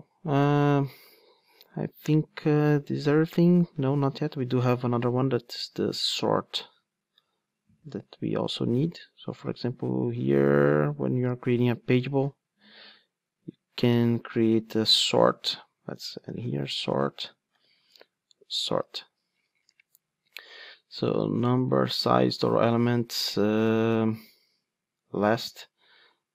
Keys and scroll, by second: 5.9 super+c, 7.9 super+v, 9.3 super+p, 18.9 Return.